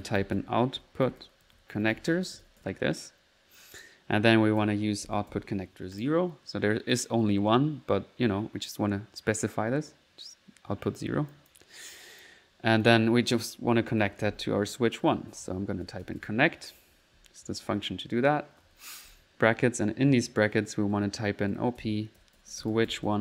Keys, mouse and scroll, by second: 0.0-3.1 typing, 5.7 alt+0, 6.0 click, 6.3 middle click, 6.9 alt+click, 11.3 click, 12.0 click, 12.8 click, 13.3 click, 14.0-16.7 typing, 18.4-19.1 typing, 19.5 Left, 20.6-23.2 typing, 20.9 Left.